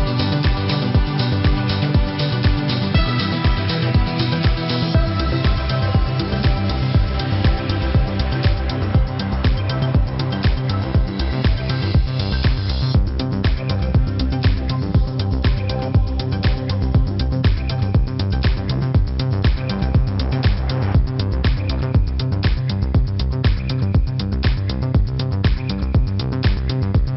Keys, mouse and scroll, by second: 6.9 Left, 7.5 Up, 7.5 Left, 7.8 Up, 8.0 Left, 8.5 Up, 9.4 click, 17.5 F9, 19.1 click, 23.9 KP_1, 24.5 Tab, 26.1 KP_0, 26.9 KP_3.